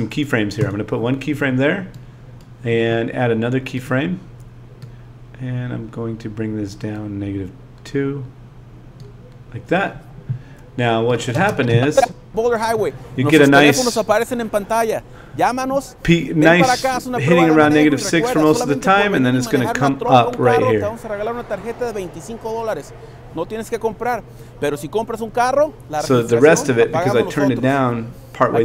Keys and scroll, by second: 11.3 space.